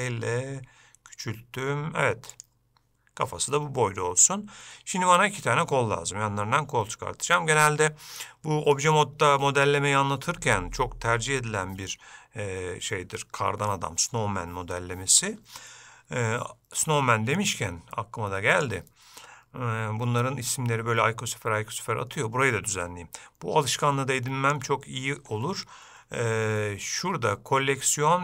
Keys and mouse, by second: 17.7-18.8 drag, 24.1 click.